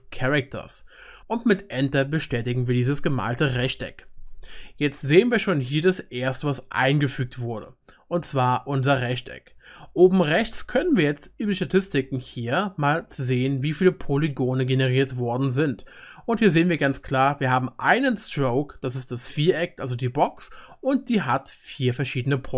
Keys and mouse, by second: 8.8-20.8 drag, 8.8-20.8 middle drag, 8.8-20.8 right drag.